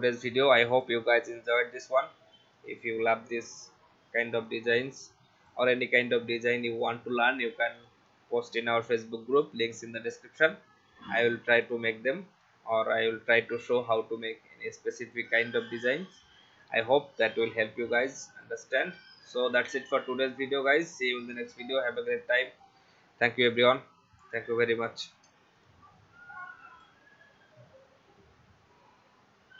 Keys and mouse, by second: 0.1 click, 2.6 click, 6.8 click, 8.8 click, 11.6 click, 15.0 click, 18.3 click, 19.4 click, 25.4 space, 25.5 click, 26.7 click.